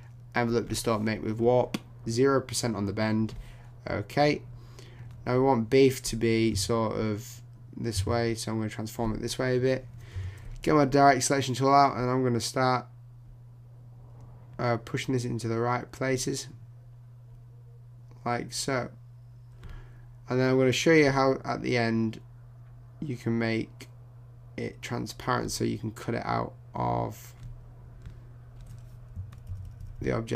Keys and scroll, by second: 29.5 shift+Down.